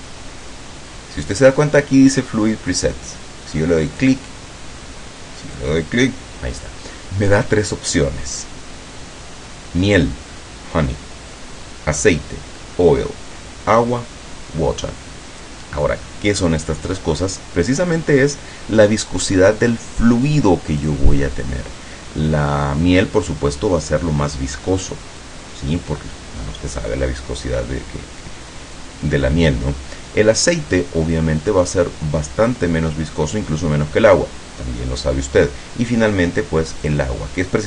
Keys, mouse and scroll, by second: 5.6 click, 21.0 click, 37.0 click.